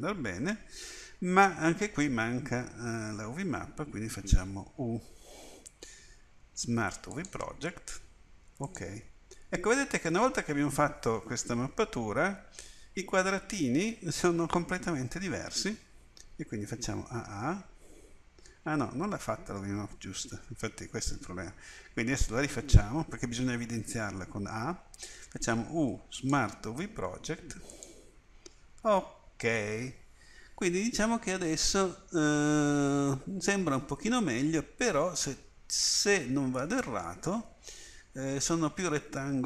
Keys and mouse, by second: 2.7 Tab, 4.7 u, 16.8 a, 17.1 a, 25.3 u.